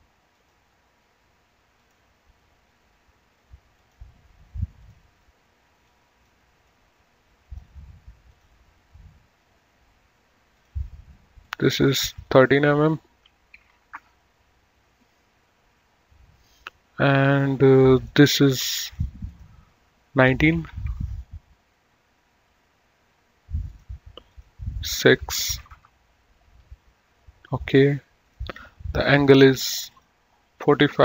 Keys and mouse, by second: 0.4 click, 2.0 click, 4.0 click, 8.6 click, 10.6 click, 12.0 right click, 12.5 click, 13.9 KP_1, 14.0 KP_3, 14.2 KP_Enter, 17.5 click, 20.8 KP_1, 21.0 KP_9, 21.3 KP_Enter, 23.8 click, 25.8 KP_6, 26.0 KP_Enter, 28.4 click.